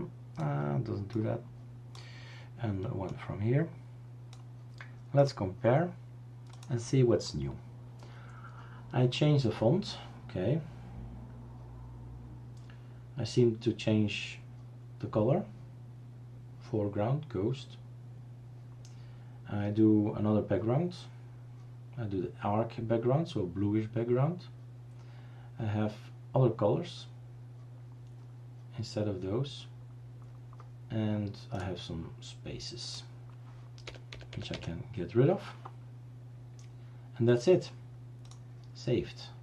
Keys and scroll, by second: 33.9 Delete, 34.3 Delete, 34.4 Delete, 34.5 Delete.